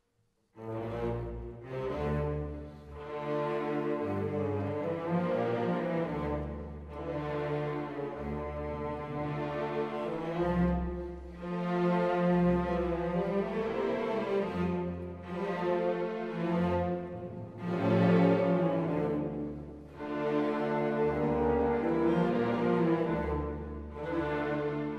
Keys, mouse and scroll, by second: 0.3 alt+click, 0.5 scroll up 1, 0.6 middle click, 0.7 right click, 0.7-5.7 typing, 1.4 click, 1.7 click, 2.1 scroll down 1, 2.2 click, 2.7 right click, 2.8 scroll up 1, 2.9 alt+click, 3.4 alt+click, 3.6 right click, 4.0 click, 4.1 scroll down 1, 4.5 alt+click, 4.6 right click, 4.7 alt+click, 4.9 shift+right click, 5.0 alt+click, 5.2 middle click, 5.3 right click, 5.4 click, 5.7 click, 5.9 click, 6.6 right click, 6.7 alt+click, 6.8 3, 6.9 alt+click, 7.1 right click, 7.2 alt+click, 7.5 alt+scroll up 1, 7.6 alt+click, 7.9 alt+click, 7.9 middle click, 8.0 alt+click, 8.1 right click, 11.2-11.6 scroll down 1, 11.9 scroll down 1, 13.5 click, 13.5 scroll down 1, 13.6 click.